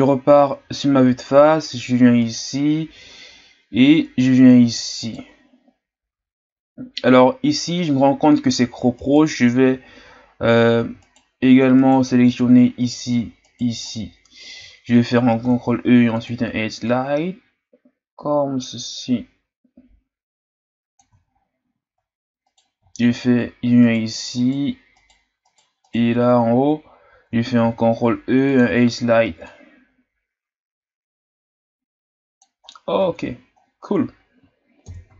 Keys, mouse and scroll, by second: 0.1-0.6 scroll up 2, 0.6-1.4 ctrl+scroll down 3, 1.4-2.2 scroll up 1, 2.2-7.3 right drag, 7.3-8.5 ctrl+scroll up 1, 9.0-12.6 right drag, 12.6-13.4 shift+scroll up 4, 13.4 shift+right click, 13.9-15.4 scroll down 1, 15.4 ctrl+e, 21.3-22.4 shift+scroll up 9, 22.4 right click, 22.8-23.8 shift+scroll up 6, 23.8 shift+right click, 24.3-27.6 shift+right drag, 27.6 ctrl+e, 32.7-33.6 scroll down 3, 33.6-34.8 scroll down 7, 34.8 KP_1.